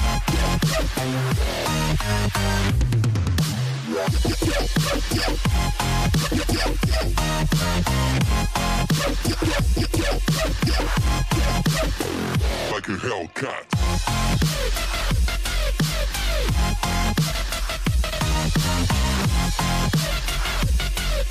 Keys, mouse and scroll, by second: 0.0 g, 3.1 ctrl+r, 7.3 ctrl+z, 9.5 ctrl+shift+z, 10.6 ctrl+r, 15.9 click, 16.7 click, 17.3-20.2 right drag, 20.2 click, 20.8-21.3 right drag.